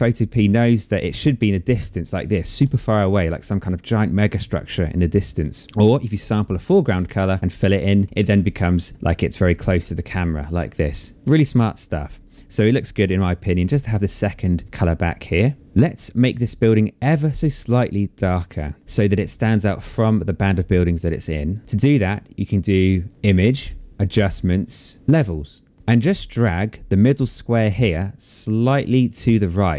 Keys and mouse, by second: 6.2 alt+click, 7.3 click, 12.6 alt+click, 13.8 click, 23.1 click, 25.3 click, 27.3 click.